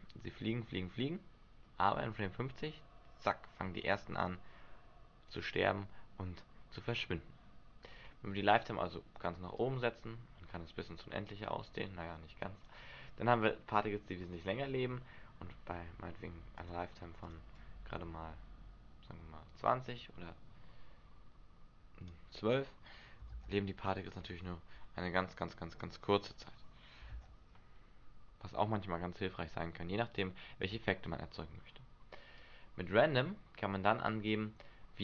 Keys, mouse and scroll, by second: 6.7-8.6 scroll up 9, 9.6 click, 16.5 click, 17.2 click, 23.3 alt+a, 24.2 Escape, 25.8 click, 27.1 alt+a, 30.6 Escape, 32.3 click.